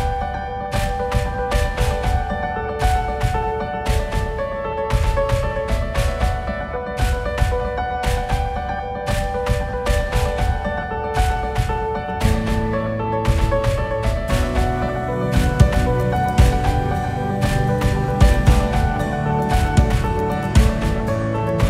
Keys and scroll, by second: 17.5 Right.